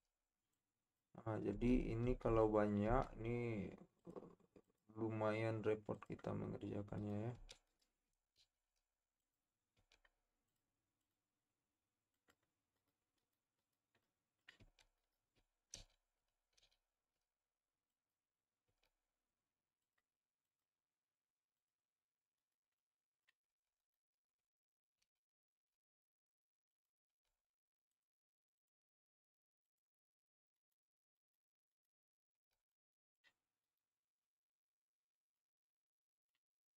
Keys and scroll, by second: 1.5 Tab, 2.0 Tab, 2.8 Tab, 7.6 Tab, 8.4 shift+s, 9.8 Tab, 14.8 Tab, 15.3 shift+Tab, 15.7 shift+s, 16.3 shift+s, 18.7 Tab, 23.6 Tab, 25.0 shift+s, 27.1 Tab, 32.6 Tab.